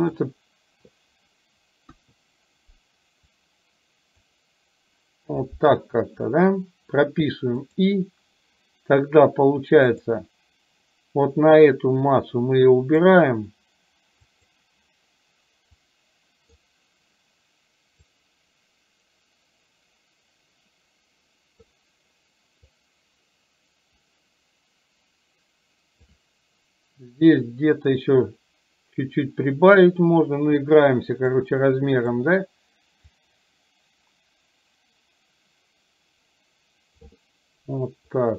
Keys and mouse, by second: 2.1 KP_1, 3.4-4.4 drag, 10.1 click, 12.3 click, 14.3 click, 15.9 click, 18.2-21.7 drag, 22.8-26.2 drag, 27.3-31.4 drag, 33.3-37.2 drag.